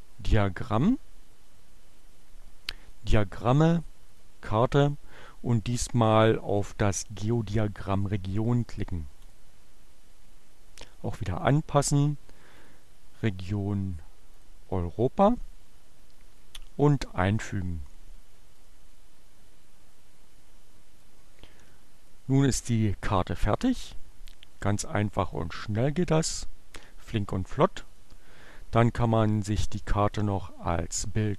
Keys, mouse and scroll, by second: 2.8 click, 4.2 click, 8.7 click, 11.2 click, 12.4 click, 13.9 click, 18.4 click, 20.9-22.2 drag, 25.1 click, 27.3 click, 29.1-30.4 drag.